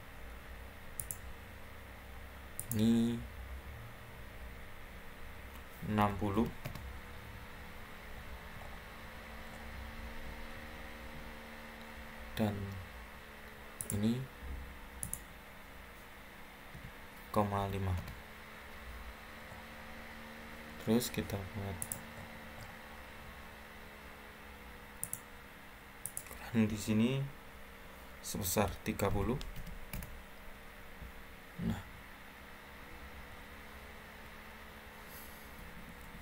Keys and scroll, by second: 5.9-6.2 typing, 6.6 Return, 16.4-17.5 typing, 17.9 Return, 28.8-29.5 typing, 29.8 Return, 35.8 Escape, 36.0 Escape.